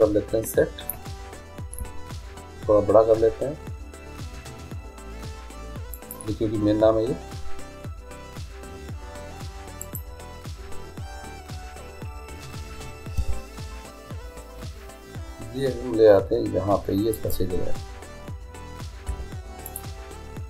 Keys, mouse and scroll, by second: 1.8 s, 9.9-11.7 right drag, 13.2 g, 19.1 i.